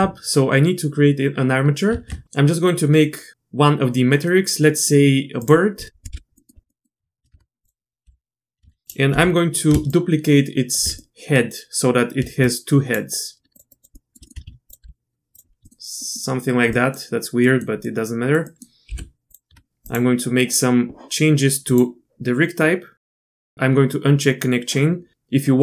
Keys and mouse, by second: 1.9 shift+a, 2.2 ctrl+z, 6.1 KP_Decimal, 6.3 click, 6.7 click, 7.3 Tab, 7.6 click, 8.1 l, 8.7 alt+a, 9.2 l, 9.9 shift+click, 11.0 click, 11.2 middle click, 12.5 shift+click, 13.5 shift+click, 13.7 shift+click, 13.9 shift+middle click, 14.3 middle click, 14.5 shift+d, 14.8 r, 15.6 click, 16.0 click, 16.7 click, 17.4 click, 17.8 click, 18.4 click, 18.9 g, 19.5 Tab, 19.8-20.5 drag, 21.7 click, 23.4-25.1 drag.